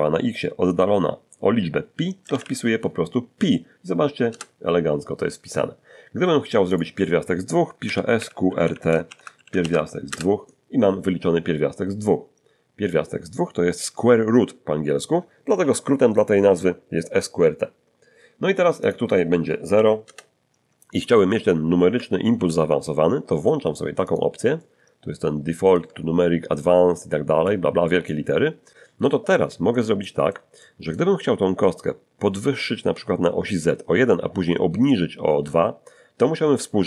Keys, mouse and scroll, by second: 2.2 p, 4.3 Return, 6.7 click, 7.8-9.6 typing, 10.1 Return, 18.8 click, 19.7 0, 20.0 Return, 22.4 ctrl+alt+u, 24.1 click, 24.6-25.9 ctrl+middle drag, 27.5 click, 28.6 middle click, 30.0 middle click, 30.6 shift+middle click.